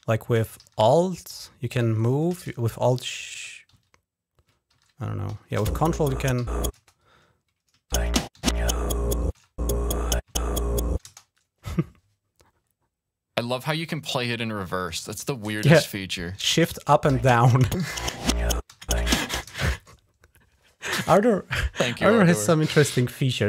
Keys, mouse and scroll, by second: 0.5 alt+Up, 1.2 alt+Down, 1.7 alt+Up, 2.3 shift+Down, 2.8 shift+Down, 3.6 ctrl+alt+Down, 4.6 ctrl+Up, 5.2 ctrl+Down, 5.5 shift+Up, 6.2 shift+Down, 6.6 space, 7.7 shift+Up, 8.2 shift+Down, 9.2 shift+Up, 10.1 shift+Down, 10.9 space, 16.9 shift+Up, 17.7 shift+Down, 18.6 shift+Up, 19.3 space.